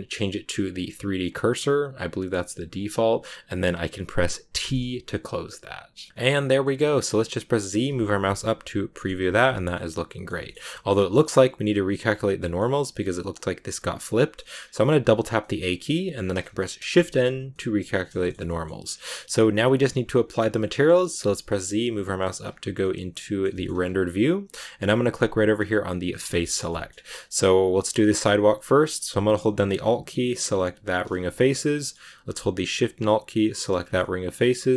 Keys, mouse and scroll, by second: 1.2-3.3 drag, 4.5 t, 6.1 middle click, 6.9 scroll up 1, 7.0 middle click, 7.7 z, 8.2 middle click, 9.1 z, 9.4-10.6 shift+middle drag, 10.6 scroll up 1, 10.6 middle click, 11.2-11.6 scroll up 2, 11.6-14.4 middle drag, 14.4 scroll down 3, 14.6 a, 14.8 a, 15.3-16.7 middle drag, 16.7 shift+n, 17.4-18.8 middle drag, 18.8-19.6 scroll up 1, 19.6 z, 20.1 middle click, 21.1 z, 22.7 middle click, 23.6 scroll up 2, 24.4-24.7 scroll up 2, 26.0 click, 26.2 scroll down 1, 26.4 shift+middle click, 26.6-27.7 scroll up 4, 30.8 alt+right click, 31.0 scroll up 1, 31.1 scroll down 1, 31.2-33.4 middle drag, 33.4 alt+shift+right click, 33.7 scroll down 1, 33.9 middle click, 34.6-34.7 scroll up 2.